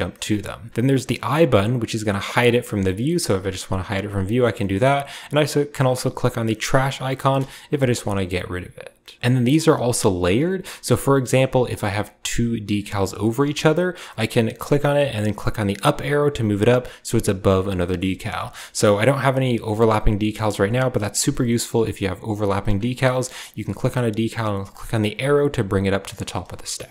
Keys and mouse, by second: 0.9 click, 1.4 click, 1.6 typing, 4.0 click, 4.5 middle click, 6.6 click, 7.6 ctrl+z, 10.9 shift+drag, 13.0 click, 17.7 shift+click, 18.5-18.8 drag, 19.1-19.4 drag, 20.2 shift+middle click, 21.2 middle click, 22.3 click, 23.6 click, 24.6 click, 24.6 typing.